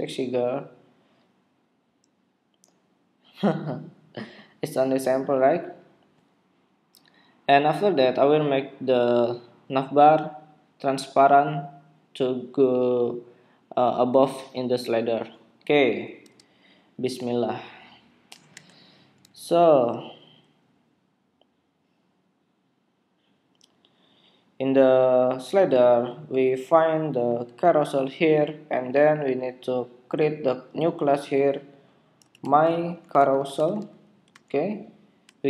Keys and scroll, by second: 18.6 super+Tab.